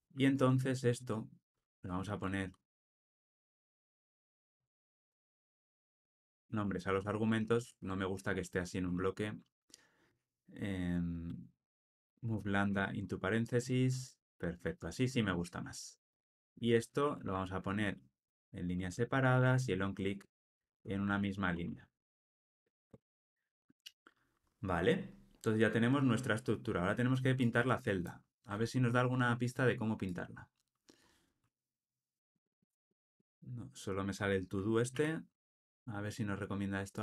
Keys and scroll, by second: 1.9 alt+Return, 7.7 alt+Return, 17.1 alt+Return, 20.1 Delete, 22.0 alt+super+l, 22.4 ctrl+alt+o, 34.9 alt+].